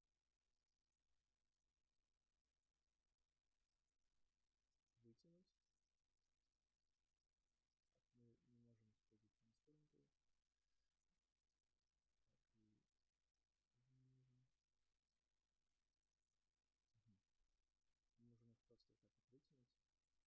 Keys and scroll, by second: 7.6 ctrl+z.